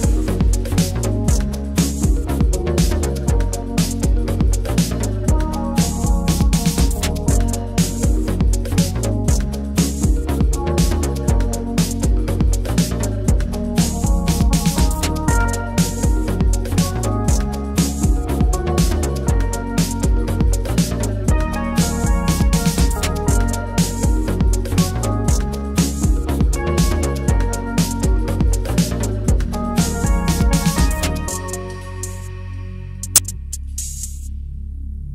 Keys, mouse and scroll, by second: 2.3-3.4 drag, 4.1 click, 4.8 click, 8.3-13.4 drag, 15.5 click, 18.0-19.5 shift+middle drag, 19.5-20.4 drag, 20.4-21.0 middle drag, 21.0-22.0 drag, 22.0-23.2 middle drag, 23.2 g, 24.2-25.7 middle drag, 25.7 g, 26.9 middle click, 27.9 click, 29.1-30.2 middle drag, 30.2 g, 31.6 click, 32.8-34.2 middle drag, 34.2 Tab, 34.7 ctrl+middle click.